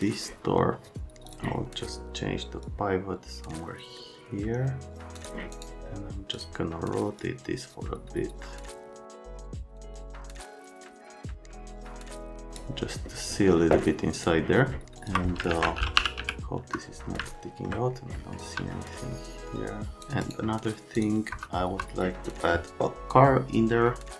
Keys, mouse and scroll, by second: 1.3 click, 2.6 click, 5.1 click, 5.5 right click, 6.3 click, 7.1 click, 9.7 right click, 9.9 click, 10.3 click, 11.8 click, 14.1 click, 15.0 click, 15.5 alt+q, 15.7-16.7 typing, 17.2 alt+middle click, 18.4 F3, 18.7 middle click, 20.0 click, 20.2 right click, 20.9 click, 21.3 F3, 21.7 F3.